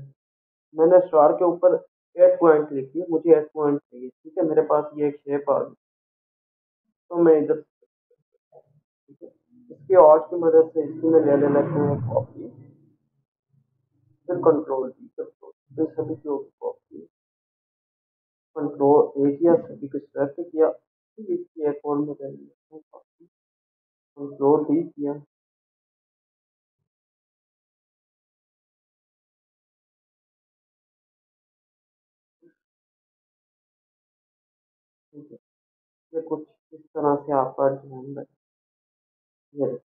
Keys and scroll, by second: 15.8 ctrl+d, 20.1 ctrl+a, 25.1 ctrl+d, 27.5 ctrl+z, 30.2 ctrl+a, 34.3 ctrl+z.